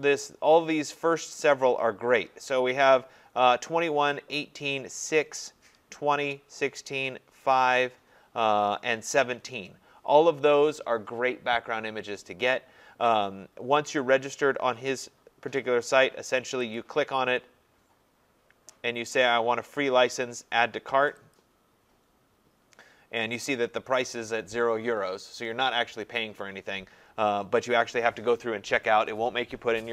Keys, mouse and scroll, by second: 5.1 middle click, 5.2 middle click, 7.6 middle click, 7.7 middle click, 7.8 middle click, 7.8 scroll, 16.7 click, 21.3 click, 22.9-26.4 drag.